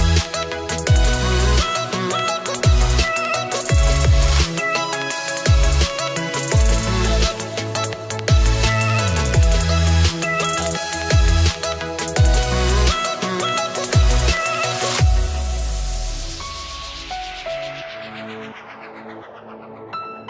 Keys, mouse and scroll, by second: 0.7 click, 1.3 click, 2.4 click, 2.5 click, 2.9 scroll down 4, 3.6 middle click, 5.4 scroll up 1, 5.6 middle click, 8.3 scroll up 1, 11.4 KP_1, 14.9 KP_3, 17.6 click.